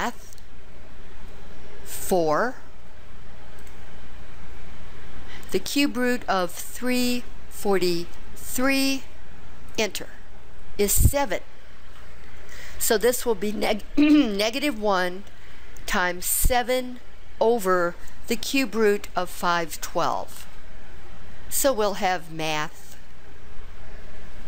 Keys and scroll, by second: 3.7 4, 6.9 3, 7.7 4, 8.7 3, 9.9 Return.